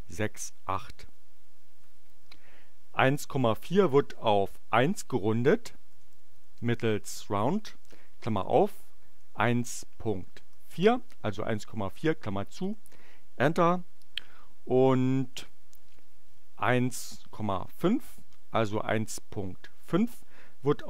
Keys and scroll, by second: 5.7-7.3 typing, 8.7 1, 9.2 ., 9.7 4, 10.8 shift+9, 12.5 Return, 15.3 Up, 15.7 Left, 17.6 Delete, 17.9 5, 20.6 Return.